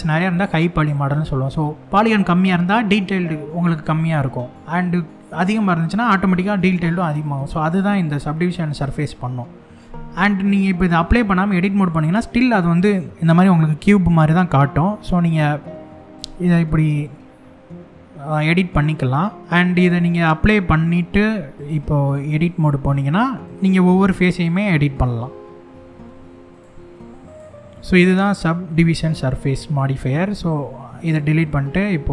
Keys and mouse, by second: 11.0 Tab, 11.5 middle click, 14.8 click, 15.7 g, 19.4 x, 19.5 Tab, 21.4 click, 22.5 Tab, 23.1 click, 24.0 click, 25.3 e, 26.1 click, 26.9 click, 26.9 s, 27.3-28.4 middle drag, 28.8 Tab, 29.4-29.9 middle drag, 30.0 x, 31.2 shift+a.